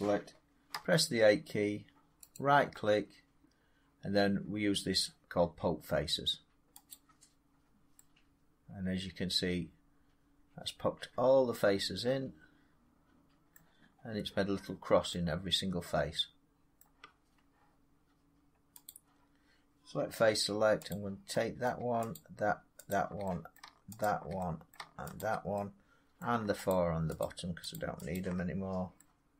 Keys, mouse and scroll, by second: 0.6 a, 2.3 right click, 6.8 click, 8.3-11.9 drag, 13.4 scroll, 13.9 scroll down 3, 14.1 scroll up 3, 16.7-17.8 middle drag, 18.8 click, 20.8 click, 21.6 middle click, 22.0 shift+click, 22.8 click, 23.5 middle click, 23.9 shift+click, 24.6 middle click, 25.1 shift+click, 26.1 middle click, 26.6 shift+click, 27.1 shift+click, 27.6 shift+click, 28.1 shift+click.